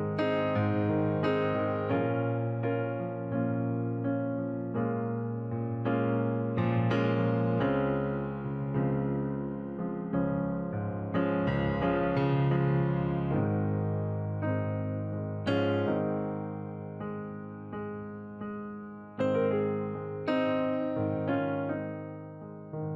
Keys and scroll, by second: 15.4 ctrl+j, 16.3 ctrl+t.